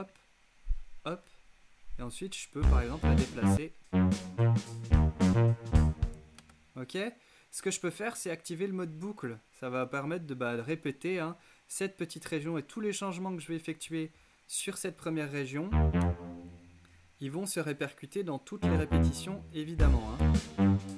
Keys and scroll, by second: 2.5 space, 5.9 space, 19.7 alt+space, 20.5 space.